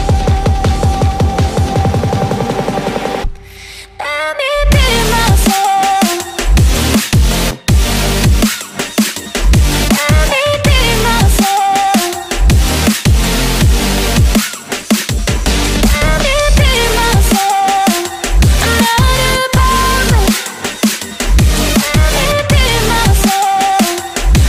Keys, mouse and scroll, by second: 3.3 right click, 5.9 right click, 24.2-24.4 typing.